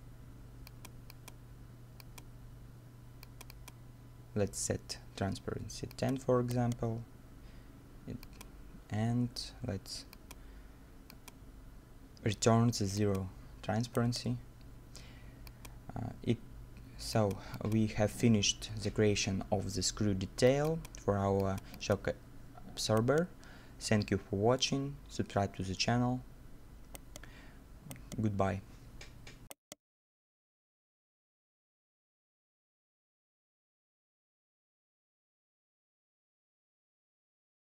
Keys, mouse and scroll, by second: 6.5 right click, 13.7 middle click, 14.4 right click, 23.0 right click, 26.7 middle click, 27.0 right click, 28.8 right click, 29.0 scroll up 1, 29.5 right click, 30.4 scroll down 1, 30.8 middle click.